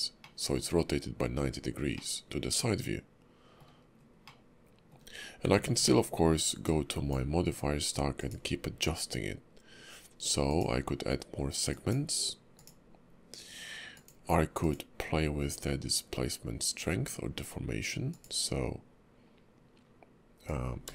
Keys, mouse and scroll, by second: 0.2 middle click, 1.9 middle click, 3.9-4.2 scroll up 2, 4.2 middle click, 5.8 ctrl+`.